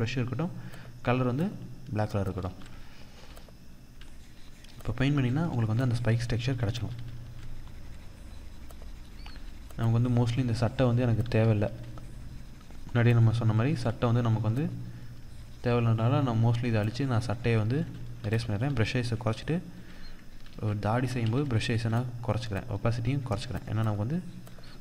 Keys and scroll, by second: 1.8 ctrl+=, 2.0 ctrl+space, 19.8 ctrl+z, 20.5 ctrl+=.